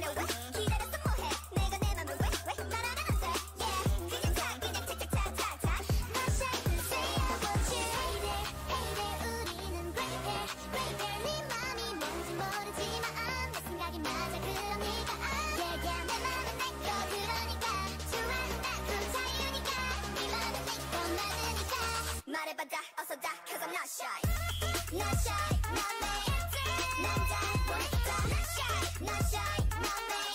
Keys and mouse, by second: 0.6-2.0 drag, 1.2 alt+m, 1.8 a, 3.1 ctrl+Tab, 3.9-5.3 drag, 8.2-9.9 drag, 9.0 c, 11.1 c, 11.9 a, 13.7 Tab, 15.3 Tab, 17.7 ctrl+Tab, 18.8-20.9 drag, 19.3 g, 21.1 click, 21.7 g, 25.1-27.0 drag, 25.4 g, 27.7 r, 29.3 ctrl+Tab.